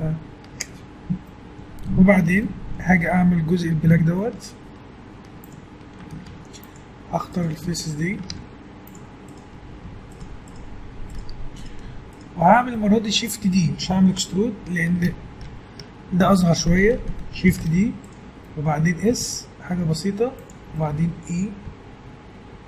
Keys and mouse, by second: 5.2 Tab, 6.3 ctrl+Tab, 8.3 ctrl+Tab, 17.5 shift+d, 19.1 s, 20.4 click, 21.7 click, 21.7 e.